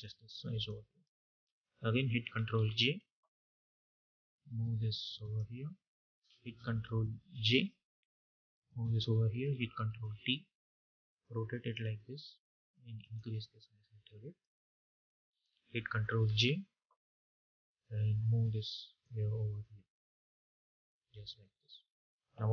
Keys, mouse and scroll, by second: 1.0 Return, 3.6-7.2 drag, 7.2 ctrl+j, 7.9-9.8 drag, 9.8 ctrl+t, 10.7-14.8 drag, 14.8 Return, 16.7 ctrl+j, 17.0-21.7 drag.